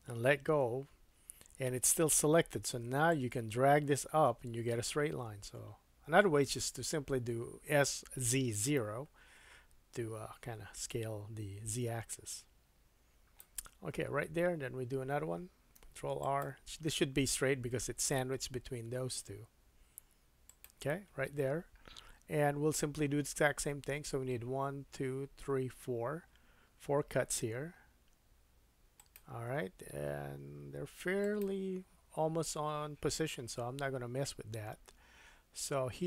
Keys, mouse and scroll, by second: 3.1-20.6 drag, 15.7 ctrl+r, 27.1 ctrl+r, 33.6-33.9 scroll up 2.